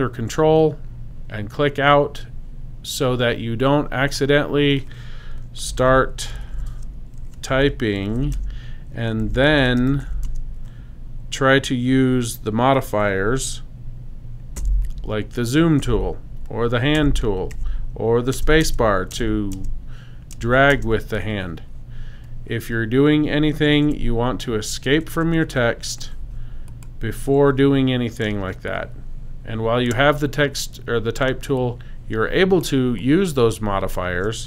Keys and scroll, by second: 5.5-10.5 typing, 14.6 z, 15.8 z, 16.9 h, 18.3 space, 23.6 BackSpace, 25.2 BackSpace, 26.1 super+BackSpace, 28.2 super+space, 31.3 space.